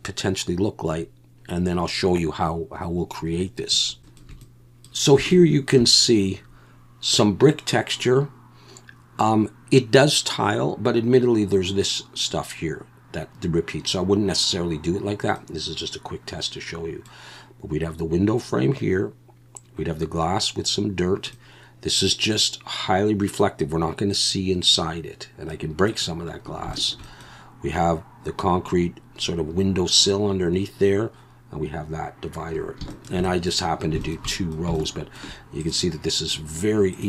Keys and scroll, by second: 4.2 alt+shift+a.